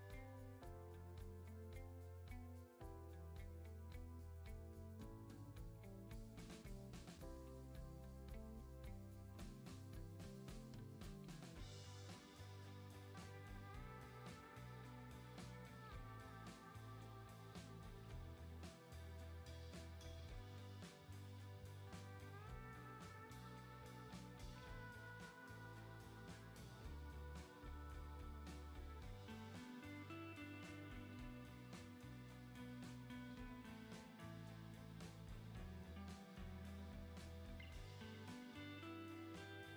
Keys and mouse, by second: 0.6 click, 1.2 click, 1.8 middle click, 2.1 click, 2.3 middle click, 2.7 shift+middle click, 3.2 shift+middle click, 3.7 alt+q, 3.9 shift+middle click, 4.1 shift+middle click, 4.6 shift+middle click, 4.8 shift+middle click, 5.7 middle click, 5.9 middle click, 6.1 click, 6.4 click, 7.5 click, 8.8 click, 9.2 /, 10.5 click, 10.8 click, 12.5 shift+middle click, 13.3 click, 13.6 Tab, 14.0 a, 14.2 shift+click, 14.6 click, 15.0 click, 16.6 click, 17.5 click, 17.7 click, 18.0 shift+click, 18.4 click, 18.6 click, 20.1 click, 20.5 shift+click, 21.2 click, 22.6-22.9 middle drag, 23.0-23.6 middle drag, 23.8 Tab, 25.5 shift+middle click, 25.8 middle click, 26.6 middle click, 27.0 middle click, 27.1 middle click, 27.2 middle click, 27.8 click, 28.0 middle click, 28.4 shift+middle click, 29.2 click, 30.8 shift+middle click, 31.0 Tab, 31.3 Tab, 31.5 Tab, 31.7 Tab, 37.6 Tab, 39.3 click.